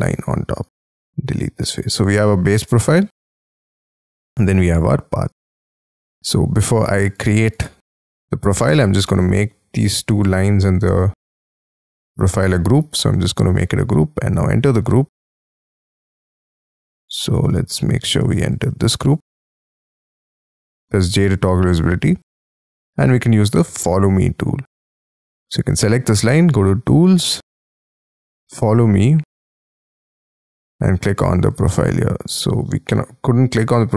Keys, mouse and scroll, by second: 0.5 shift+click, 1.5 e, 2.2 middle click, 2.5 Escape, 5.2 right click, 7.0 ctrl+click, 7.2 ctrl+double click, 7.8 ctrl+click, 8.0-10.1 scroll down 72, 8.7 middle click, 10.4 shift+middle click, 10.8 shift+scroll down 1, 11.2-12.8 scroll up 39, 12.8 g, 13.2-14.3 scroll up 15, 14.3 double click, 15.4 Escape, 16.2 double click, 16.6 Escape, 18.1 F2, 18.6 double click, 19.8 F3, 20.6 j, 21.0 scroll down 6, 21.5-21.8 scroll up 6, 21.8-23.5 scroll down 36, 23.5 middle click, 26.1-26.9 scroll up 1, 26.9 scroll up 1, 28.6-31.9 scroll up 37, 31.9 space, 32.6 scroll up 6, 32.8 middle click.